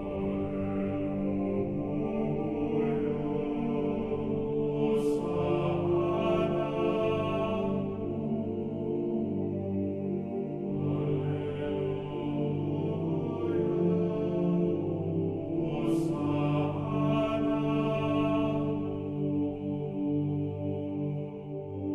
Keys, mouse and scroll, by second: 0.0-0.5 scroll up 2, 0.2 middle click, 0.5-2.9 middle drag, 3.1 click, 6.1 click, 8.5-11.6 middle drag, 11.9 right click, 12.5 r, 13.6 click, 13.9 right click, 14.1 r, 14.7 click, 14.9 right click, 15.0 r, 15.5 click, 16.0 right click, 16.2 r, 17.0 click, 17.8 KP_3, 19.9 right click, 19.9 r, 20.6 click, 21.0 right click, 21.2 r.